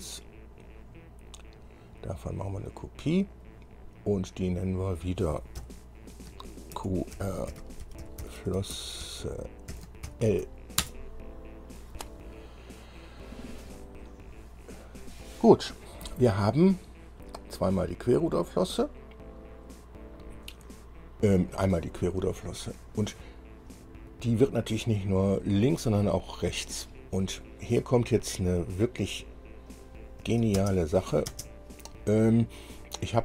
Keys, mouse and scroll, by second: 0.8 scroll down 2, 1.7 click, 3.5 click, 4.1 scroll down 2, 5.0 click, 5.8 F2, 6.9-9.9 typing, 11.0 Return, 13.9-14.2 scroll down 2, 29.9 click, 30.8 space, 31.1 click, 31.5 space, 32.6 scroll down 2.